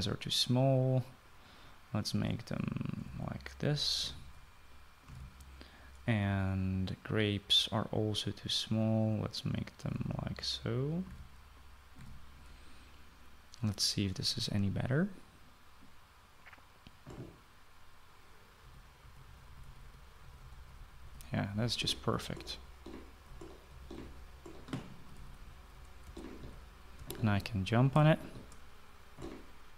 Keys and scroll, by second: 3.5-6.7 typing, 10.4-12.7 typing, 14.1 typing, 19.4-23.0 typing, 24.2-28.7 typing.